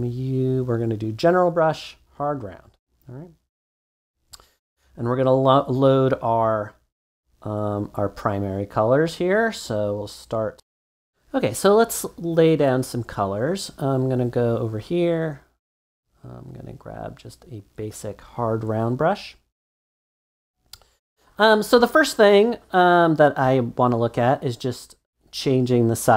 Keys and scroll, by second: 10.5 BackSpace.